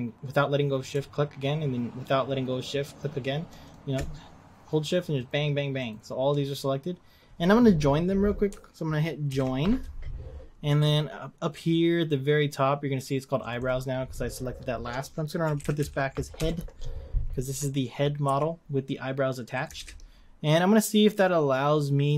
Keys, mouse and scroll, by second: 3.7 click, 5.9 shift+click, 9.3 ctrl+j, 13.6-18.2 drag, 18.2 g, 19.7 ctrl+z.